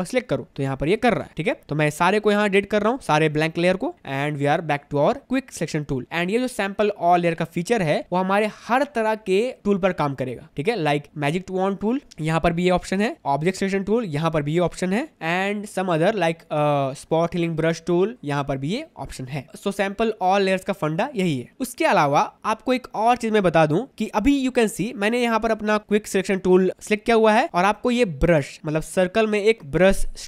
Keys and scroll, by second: 1.3 ctrl+d, 4.5 Delete.